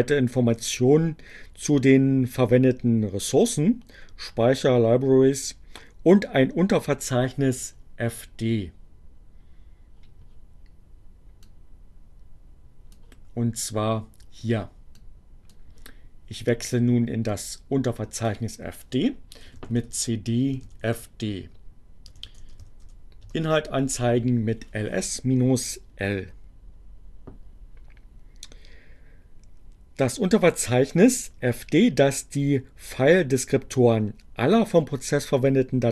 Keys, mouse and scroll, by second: 11.5-12.5 drag, 14.8 click, 17.1-18.3 drag, 19.1-22.8 typing, 22.8 Return.